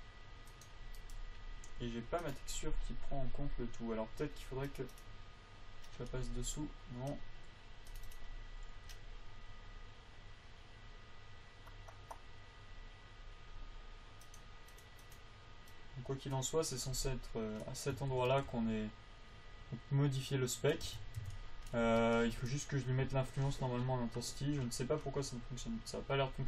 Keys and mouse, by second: 3.1-5.1 drag, 5.3 click, 6.6 right click, 8.3-17.4 drag, 18.3 a, 21.2 Tab, 21.6 Tab, 22.2 a.